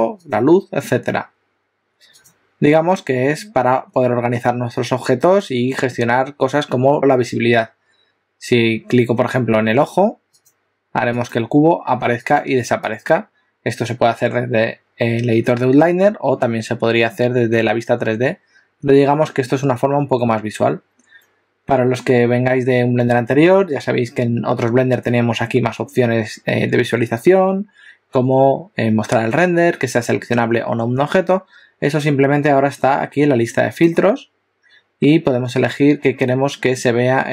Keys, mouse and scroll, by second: 2.3 click, 10.5 click, 11.2 click, 33.9 click.